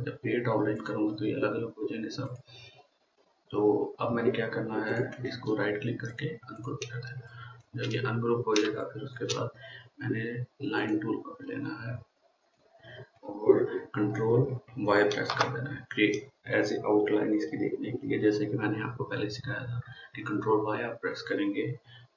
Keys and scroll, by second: 15.6 ctrl+y.